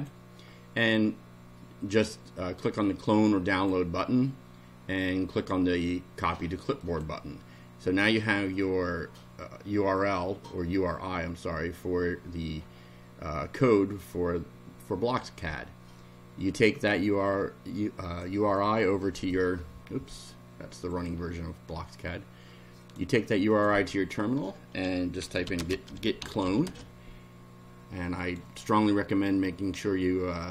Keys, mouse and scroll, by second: 3.5 click, 6.8 click, 18.0 click, 20.9 click, 22.8 click, 23.5 click, 24.9-27.0 typing, 28.2 click.